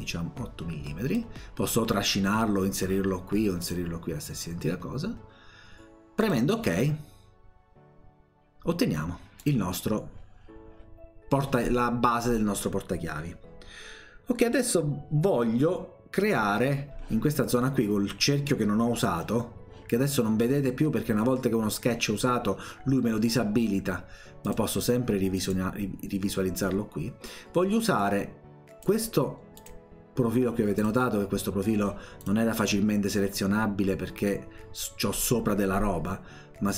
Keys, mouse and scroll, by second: 3.6 click, 6.2 click, 9.4 click, 24.4 click, 25.4 click, 28.0 click, 29.6 click, 30.8 click, 32.2 click.